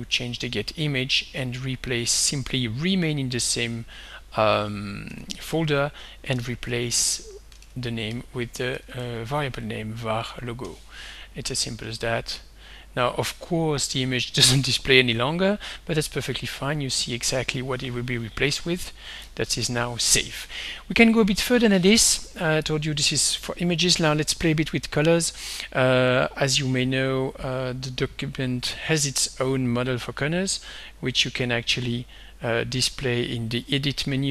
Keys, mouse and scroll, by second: 0.3 click, 1.4 click, 4.0 click, 5.2-7.2 typing, 8.5-10.4 typing, 12.2 click, 19.4 ctrl+s, 26.2 click, 32.0 click, 33.0 click, 33.9 click.